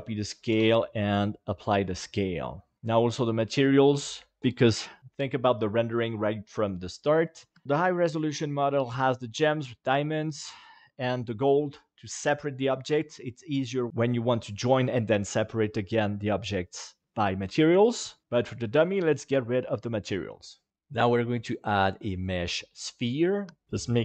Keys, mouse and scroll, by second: 0.5 ctrl+a, 4.3 shift+middle click, 21.6-22.8 drag, 23.6 g, 23.7 click, 23.9 s.